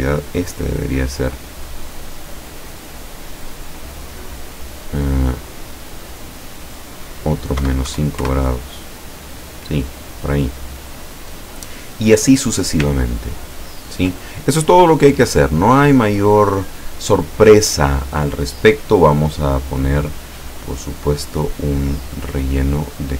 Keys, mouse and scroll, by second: 0.4 click, 5.4 click, 6.7 click, 7.6 KP_Subtract, 7.9 KP_5, 8.3 KP_Enter, 10.3 click, 12.9-14.6 ctrl+scroll down 3, 14.8-15.8 drag, 15.8 middle click, 19.1 click, 20.8 click, 22.2 click, 23.0 click.